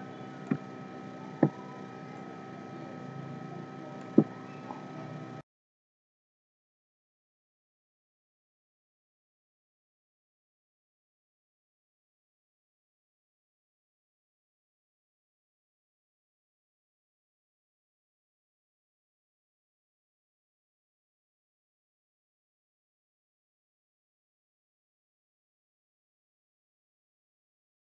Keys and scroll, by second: 24.0 ctrl+z.